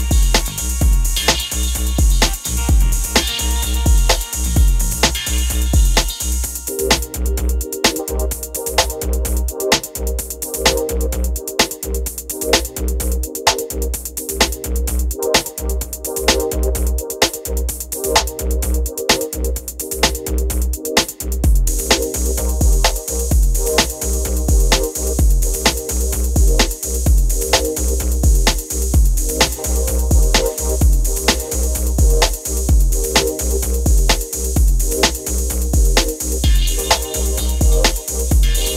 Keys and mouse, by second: 0.0 Tab, 0.6 shift+middle click, 0.8 Tab, 1.2 e, 1.4 Tab, 1.6 ctrl+s, 1.6 Tab, 1.8 click, 2.1 e, 2.1 Tab, 2.3 ctrl+s, 3.9 ctrl+s, 4.3-4.9 typing, 4.9 ctrl+s, 6.1 z, 6.2 z, 7.3 Tab, 7.6-9.1 typing, 8.4 Tab, 8.5 Tab, 8.6 ctrl+z, 8.7 ctrl+z, 9.5 click, 10.3 e, 10.3 s, 10.3 f, 10.4 Tab, 11.5 ctrl+s, 12.2-13.5 typing, 15.9 ctrl+s, 16.1-19.0 typing, 17.6 click, 18.2 KP_Enter, 19.9 click, 20.3 click, 20.6 click, 21.9 drag, 22.3 click, 23.2 shift+click, 23.6 shift+click, 23.9 shift+click, 24.3 click, 24.7 shift+click, 25.2 shift+click, 25.5 shift+click, 25.9 click, 27.9 click, 30.8 click, 31.0 click, 31.7 click, 32.3 click, 32.5 click, 34.0 click, 34.2 click, 35.4 click.